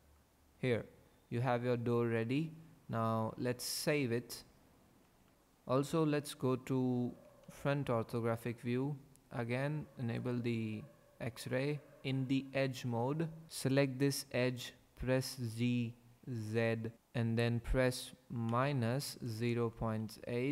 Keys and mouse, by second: 5.1 ctrl+s, 5.3 KP_5, 5.3 KP_1, 7.1 KP_5, 7.4 KP_1, 10.2 click, 13.7 click, 15.5 g, 16.4 z, 18.5 KP_Subtract, 19.4 KP_0, 19.6 KP_Decimal, 20.1 KP_8.